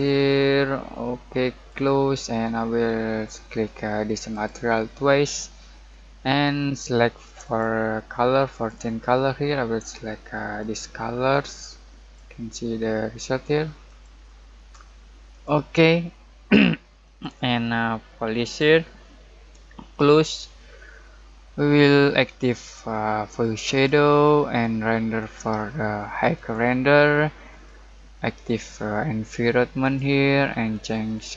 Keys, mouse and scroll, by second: 4.0 click, 7.4-13.8 drag, 22.5-31.3 drag.